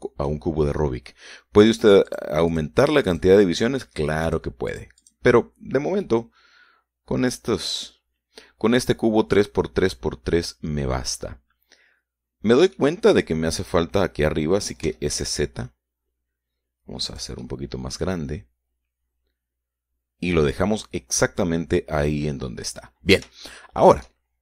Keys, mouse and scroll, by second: 3.3 click, 3.7 click, 4.3 click, 5.5 click, 5.9 click, 7.3-14.2 middle drag, 16.1 s, 16.4 shift+z, 18.3 click, 18.7-24.1 middle drag, 24.1-24.4 scroll up 1.